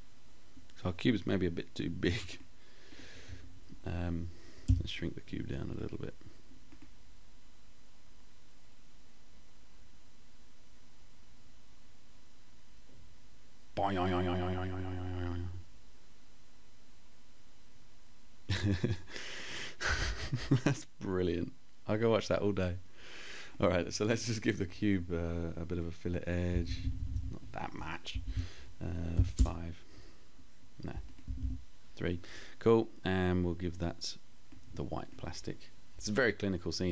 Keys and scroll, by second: 3.7 t, 25.5 Down, 28.2 5, 28.4 Return, 30.2 Down.